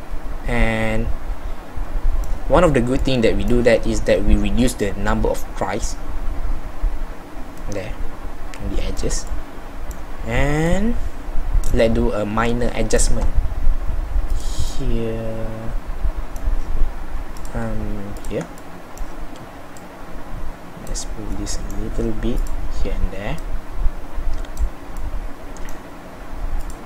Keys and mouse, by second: 0.4 middle click, 7.6 middle click, 8.1-9.5 middle drag, 9.6 middle click, 10.8 middle click, 12.1 middle click, 12.6-14.4 middle drag, 14.7-16.3 middle drag, 16.3-18.7 middle drag, 18.7-21.4 right drag, 21.6-26.8 middle drag.